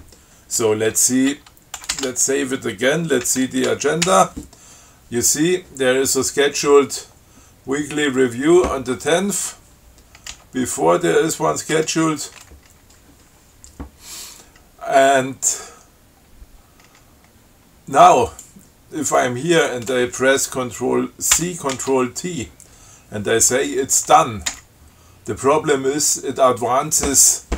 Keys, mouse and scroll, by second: 2.0 ctrl+x, 2.2 ctrl+s, 3.5 ctrl+c, 3.9 ctrl+a, 10.6 b, 12.0 f, 18.5 click, 19.4 click, 19.8 click, 21.6 ctrl+c, 22.0 ctrl+t, 24.7 d.